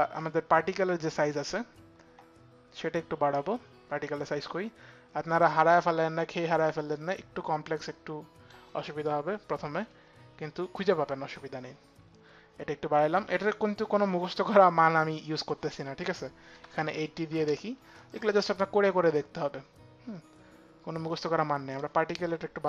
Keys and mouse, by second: 5.0 click, 15.0 click, 16.2 click, 16.2 KP_8, 16.4 KP_0, 16.8 Return, 22.4 KP_1, 22.6 KP_0.